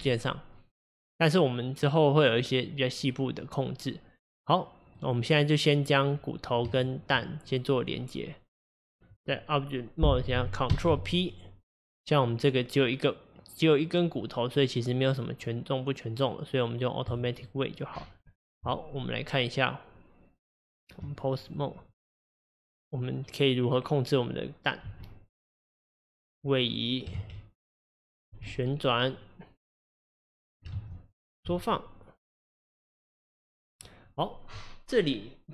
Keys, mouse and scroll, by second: 5.0 click, 6.7 shift+click, 10.7 ctrl+p, 18.3 Tab, 21.5 click, 21.9 click, 24.9 g, 27.2 ctrl+z, 28.4 r, 30.8 ctrl+z, 31.5 s.